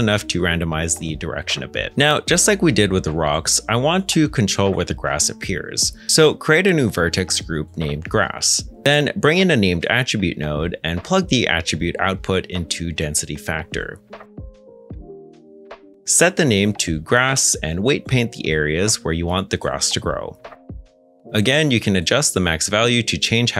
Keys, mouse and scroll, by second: 0.4-1.1 typing, 3.4 scroll down 1, 8.8 shift+g, 9.1 r, 9.1 a, 9.3 s, 9.6 Return, 10.4 shift+a, 11.7-12.1 typing, 12.4 Return, 16.6 g, 16.7 r, 16.8 a, 18.2 ctrl+Tab, 21.2 ctrl+Tab, 21.8 middle click.